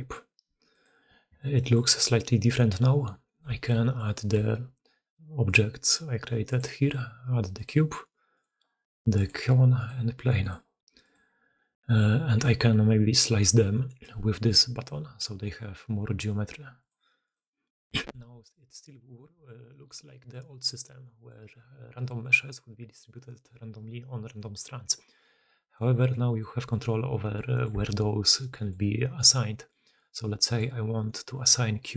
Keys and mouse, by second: 0.0-31.9 typing, 1.4 middle click, 3.1 middle drag, 3.4 shift+middle click, 3.7 middle drag, 7.5 middle click, 8.2 middle click, 9.7 middle click, 11.4-11.9 middle drag, 12.1 middle drag, 13.6 middle click, 16.8 middle click, 18.0 middle click, 18.4 shift+middle drag, 18.7 shift+middle drag, 19.4 middle click, 20.2-20.9 middle drag, 21.3-22.0 middle drag, 22.2-24.1 middle drag, 24.4-24.9 middle drag, 25.7-26.0 middle drag, 26.3-27.5 middle drag, 27.7 alt+a, 28.3-28.6 middle drag, 29.4 middle drag, 30.2 middle click, 30.9 middle click.